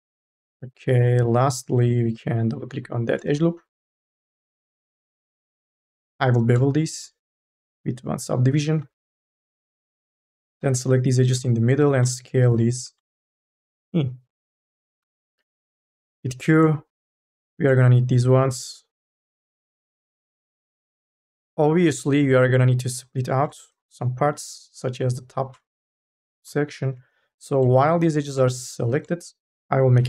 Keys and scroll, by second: 0.0-1.2 typing, 3.1 e, 4.9 ctrl+s, 5.9 m, 6.3 s, 8.9 ctrl+z, 10.4 e, 12.3 t, 15.7 k, 16.1 l, 16.2 q, 21.5 ctrl+z, 25.7 2, 26.2 3, 27.0 e, 28.4 2, 29.7 u.